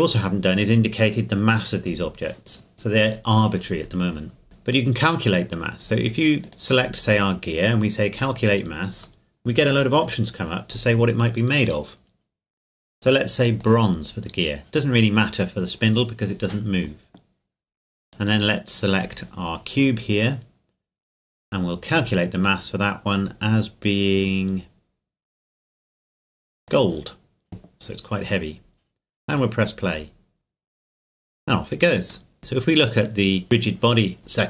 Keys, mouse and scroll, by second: 6.4 right click, 7.8 right click, 8.2 click, 13.6 click, 18.1 right click, 21.9 right click, 22.0 click, 26.7 click, 29.3 click, 32.3 middle click, 32.4 click.